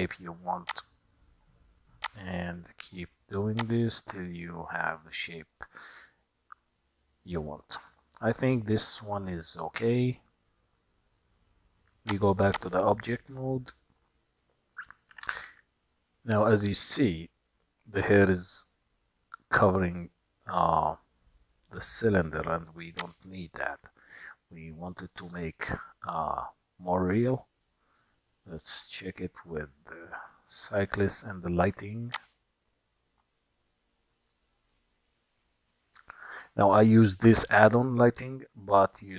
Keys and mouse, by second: 0.9-1.7 drag, 2.1-3.1 drag, 3.6-5.4 drag, 6.2-8.6 middle drag, 10.9 click, 12.1-12.7 drag, 15.1 g, 27.7 click, 29.9-30.8 drag, 32.2 click, 38.6 click.